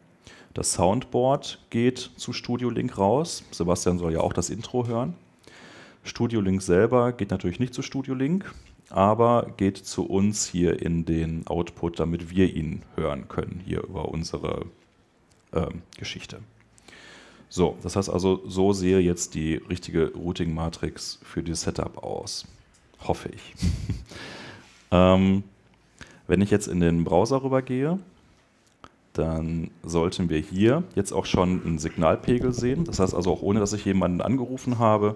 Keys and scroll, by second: 26.6 super+Tab.